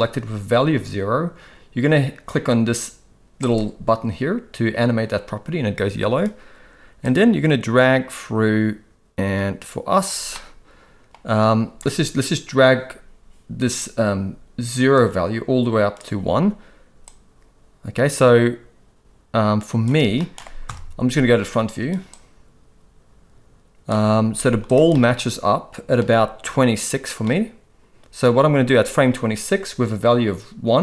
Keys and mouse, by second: 3.4 click, 7.0-10.0 drag, 10.3-11.1 middle drag, 15.0-16.0 drag, 17.0-19.8 drag, 20.2 middle click, 20.6 KP_1, 22.1-23.9 drag, 24.3 z, 24.9-25.9 middle drag, 27.2 middle click.